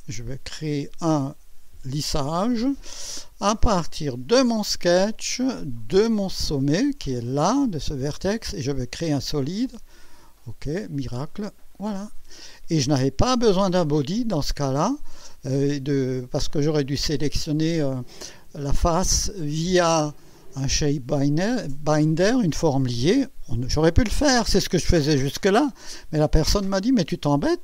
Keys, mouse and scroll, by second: 1.9 click, 3.4 click, 4.3 click, 5.2 click, 6.3 click, 8.7 click, 10.2 click, 11.0-12.7 drag.